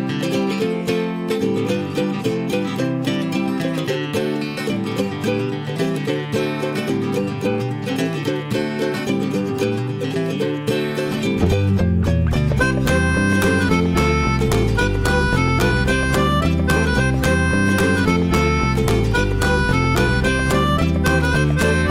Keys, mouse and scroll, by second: 0.9-1.4 scroll up 1, 1.4-5.6 shift+middle drag, 20.2-21.0 scroll up 4, 21.0-21.9 shift+middle drag.